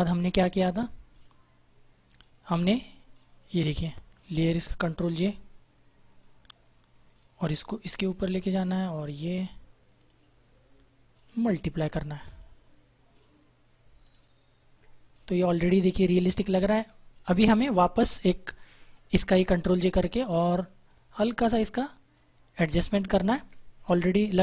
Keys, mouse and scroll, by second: 0.7 click, 4.8 click, 6.5 ctrl+j, 7.3 click, 9.9 alt+click, 14.0 alt+click, 18.9 ctrl+j, 20.8 click.